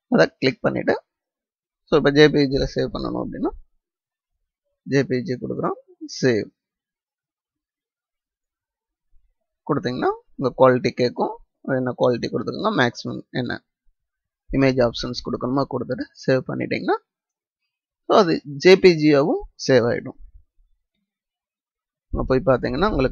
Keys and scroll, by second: 21.6 ctrl+o.